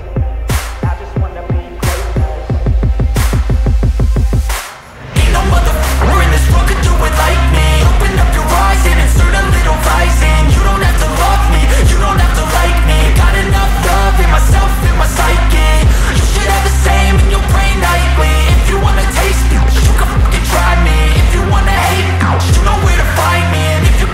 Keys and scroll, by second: 3.1 ctrl+t.